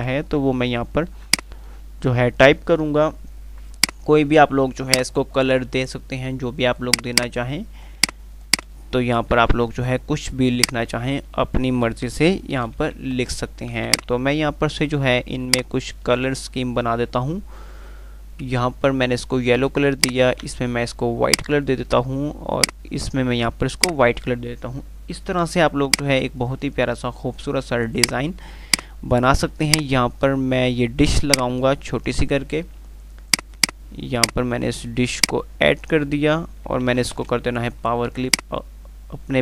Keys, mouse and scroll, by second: 3.9 click, 4.4 F2, 4.9 click, 5.1-5.6 F2, 7.0 click, 9.7 F3, 10.6-12.0 drag, 12.7 g, 12.9 Delete, 13.4 z, 13.8 click, 14.1 c, 14.5 click, 15.7 ctrl+click, 19.4 ctrl+click, 22.9 ctrl+click, 23.3 ctrl+r, 24.0 click, 24.2 F3, 25.8 click, 26.3 F2, 28.2-31.0 drag, 31.3 F2, 31.5 click, 31.7-32.5 F2, 33.4-36.4 drag, 37.1 w, 38.6 click.